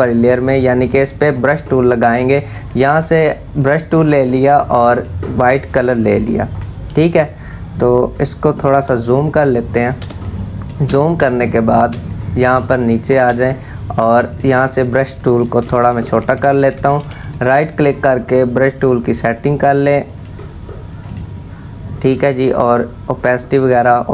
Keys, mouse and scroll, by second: 3.2 click, 8.4 z, 8.9 click, 9.7 space, 9.8 click, 10.2 space, 11.0 click, 11.3 space, 11.7 click, 12.3 space, 12.4 click, 12.8 space, 13.9 click, 15.2 typing, 16.6 typing, 16.9 right click, 18.5-20.7 drag.